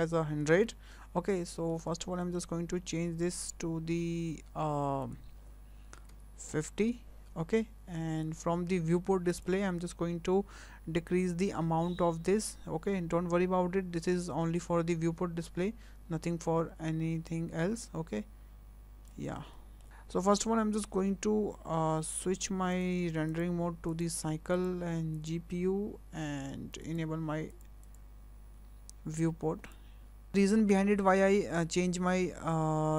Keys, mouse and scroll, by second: 1.3 scroll down 3, 1.6 shift+middle click, 1.9 scroll up 2, 2.2 shift+middle click, 5.1 click, 9.3 click, 11.1 click, 19.5 shift+middle click, 22.5 scroll up 1, 22.7 click, 23.3 click, 24.6 click, 26.8 click, 27.5 click, 27.9 click, 29.6 click.